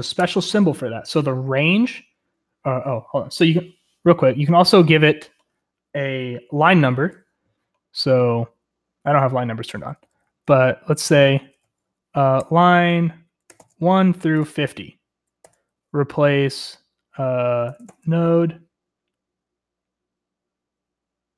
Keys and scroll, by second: 0.2 u, 9.7-11.3 typing, 12.3-15.4 typing, 17.7 typing.